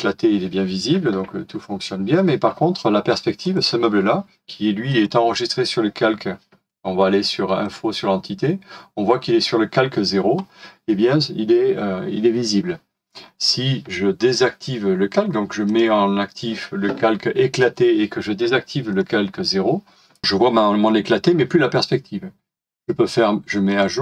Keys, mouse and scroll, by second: 13.2-16.3 scroll down 1, 22.7 right click.